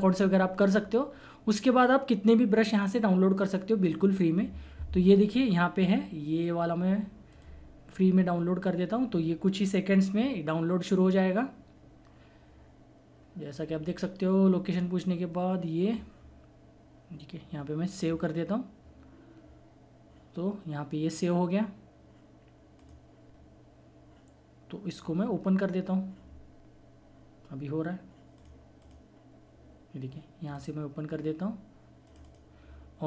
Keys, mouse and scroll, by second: 7.3 click, 18.0 click, 22.8 click, 22.9 click, 25.4 typing, 28.4 click, 30.6 typing.